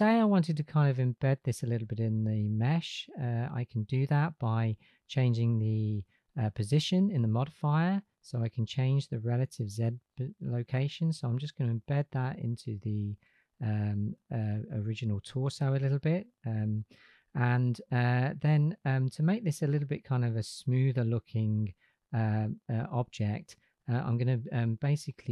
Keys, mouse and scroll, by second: 7.4-14.2 drag, 16.2 click.